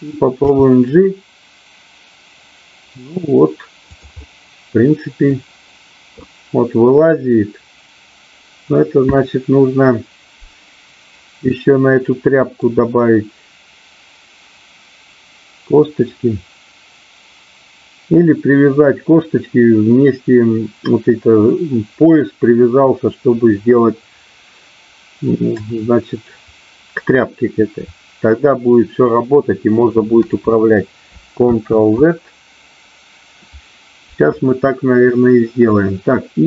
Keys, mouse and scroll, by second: 0.4 g, 4.2-5.3 middle drag, 8.7-12.5 scroll up 1, 32.8 ctrl+z, 35.7 middle click.